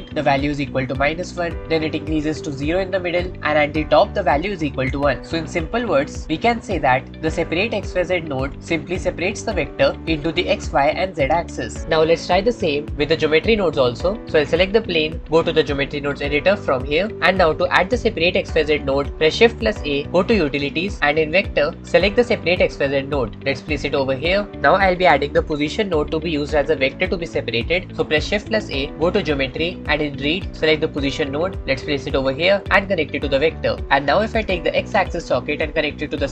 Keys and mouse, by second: 6.2 middle click, 16.1-17.1 drag, 17.1 middle click, 18.5-19.1 middle drag, 20.0 shift+a, 28.8 shift+a, 33.2-33.8 middle drag, 35.5 middle click, 35.8-36.3 middle drag.